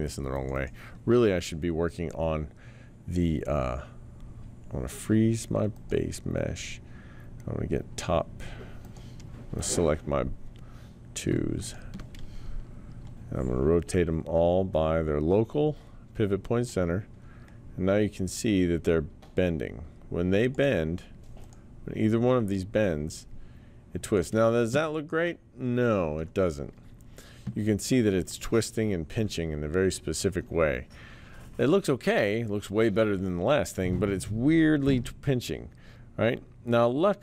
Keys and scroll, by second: 12.8 e, 29.1 t.